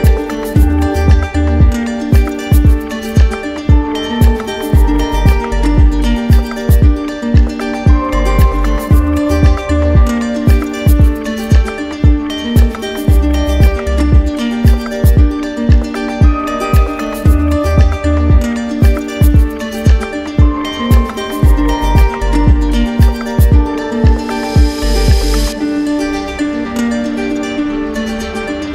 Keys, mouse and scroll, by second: 0.0 alt+click, 0.4 click, 2.8 click, 3.0 ctrl+z, 5.8 ctrl+z, 5.8 ctrl+click, 8.4 ctrl+z, 8.4 ctrl+click, 11.3 ctrl+click, 11.4 ctrl+z, 12.3 click, 14.8 click, 14.8 ctrl+click, 14.9 ctrl+z, 17.4 click, 17.6 ctrl+z, 20.4 click, 20.5 ctrl+z.